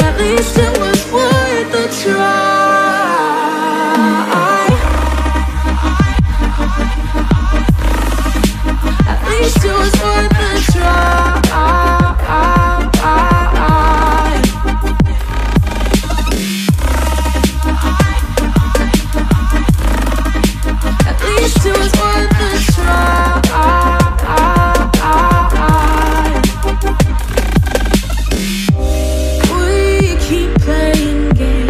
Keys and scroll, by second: 7.8 p, 11.2 p, 18.3 Up, 20.5 Up, 23.3 Up, 23.4 Left, 25.5 ctrl+-, 25.7 ctrl+0, 26.5 ctrl+=, 29.1 ctrl+=.